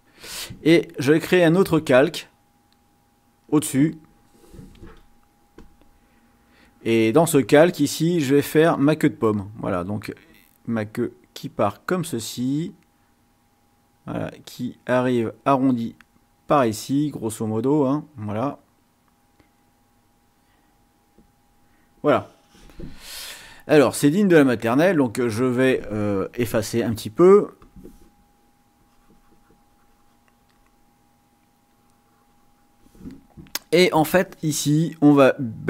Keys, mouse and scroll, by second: 1.9 click, 5.5 click, 9.1 click, 10.1 click, 11.3-15.3 drag, 15.7-16.8 drag, 17.3-18.8 drag, 19.1-21.7 drag, 23.8-24.2 ctrl+scroll up 2, 24.8 ctrl+scroll up 2, 27.6 click, 28.7-30.8 drag, 32.6 click, 34.0 click, 35.5-35.6 drag.